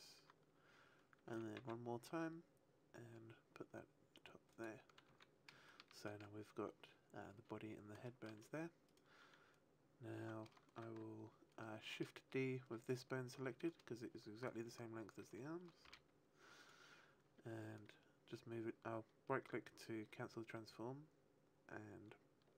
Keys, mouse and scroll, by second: 1.2 e, 4.6 click, 5.0 a, 5.6 shift+middle click, 8.0 shift+middle click, 8.8 right click, 15.8 shift+d, 16.6 right click, 19.6 click.